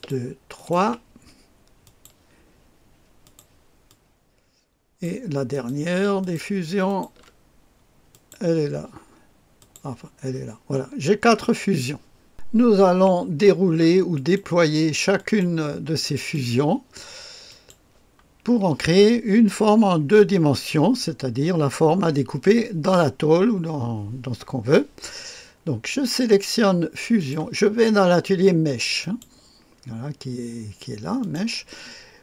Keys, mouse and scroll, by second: 0.6 ctrl+click, 1.8 click, 3.2 click, 3.9-5.7 drag, 6.2 ctrl+click, 6.9 ctrl+click, 8.1 click, 9.6 click, 12.3 click, 14.1 click, 15.2 click, 16.2 click, 17.5 click, 27.2 click, 29.0 click, 29.4 click, 31.2 click.